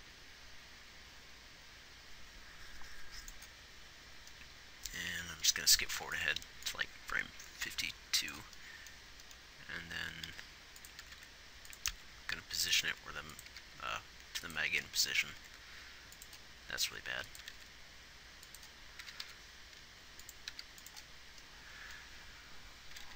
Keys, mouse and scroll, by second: 6.2 ctrl+s, 10.6 r, 11.4 r, 13.1 r, 13.8 g, 15.6 r, 17.2 r, 19.3 g, 20.8 g.